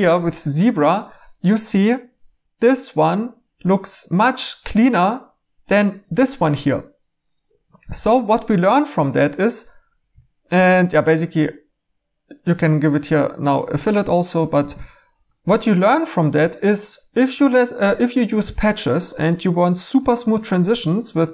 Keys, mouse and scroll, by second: 7.9 e, 10.5 2, 14.6 e.